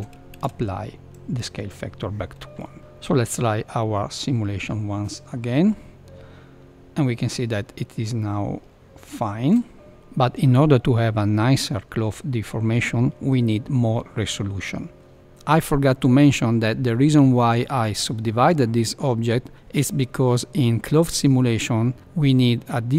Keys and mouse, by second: 0.3 ctrl+a, 2.8 Left, 2.8 space, 5.7 KP_1, 15.1 Left, 15.3-15.7 middle drag, 15.9 Tab, 17.5 middle click.